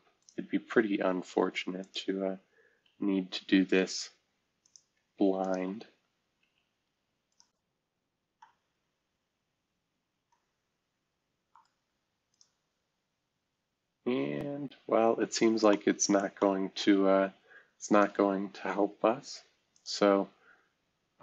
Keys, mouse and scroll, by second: 3.0 Escape, 3.5-4.4 scroll up 1, 4.6 click, 5.4 ctrl+click, 6.4 c, 7.8 scroll up 2, 11.4-12.3 right drag, 13.9 scroll down 2, 14.5 scroll up 2, 15.0 scroll up 2, 15.7 middle click, 19.7 click.